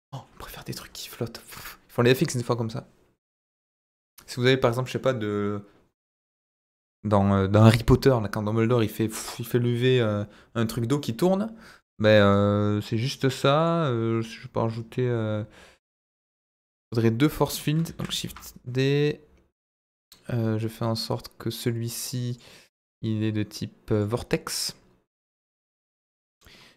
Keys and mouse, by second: 12.1 click, 13.6 click, 17.8 shift+d, 18.2 Escape, 21.6 click, 22.2-24.0 drag.